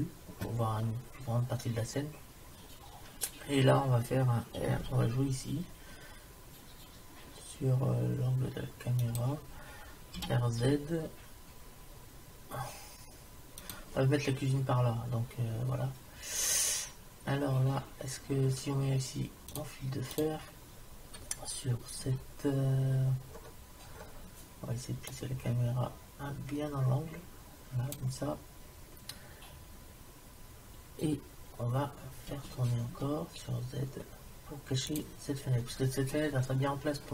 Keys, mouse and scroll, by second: 4.8 r, 10.2 r, 19.7-21.5 drag, 22.0 KP_7, 23.3-25.1 middle drag, 25.1 click, 26.0 click, 32.3 r.